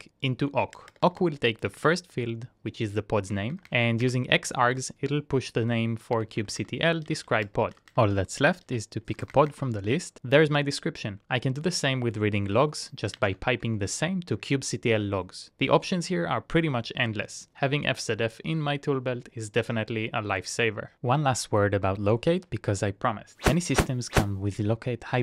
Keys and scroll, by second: 0.2 BackSpace, 0.3 BackSpace, 2.0 Return, 3.4 Up, 3.5 Up, 3.7 Up, 4.2 Return, 4.6 Up, 5.8-8.8 typing, 9.1 Up, 9.3 Up, 9.5 Up, 10.1 Return, 11.5 BackSpace, 11.7 Return, 12.9-13.8 typing, 14.6 Return.